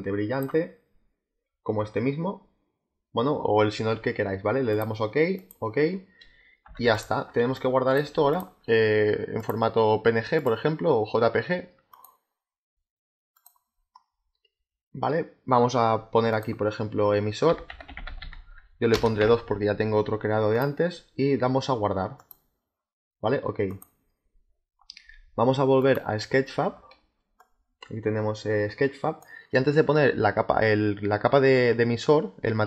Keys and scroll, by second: 6.5 z, 7.3 space, 17.1-19.1 typing.